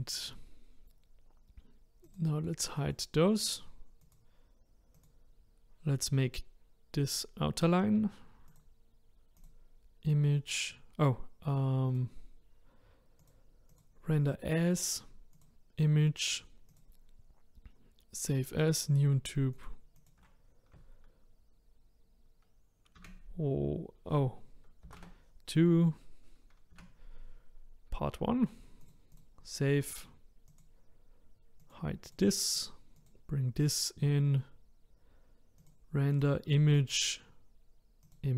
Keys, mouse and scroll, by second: 2.1 click, 2.8 click, 3.4 click, 4.0 click, 4.9 click, 8.4-11.5 drag, 11.9 click, 13.2-16.3 drag, 31.6 click, 32.1 click, 32.6 click, 32.9 click, 35.6-38.3 drag.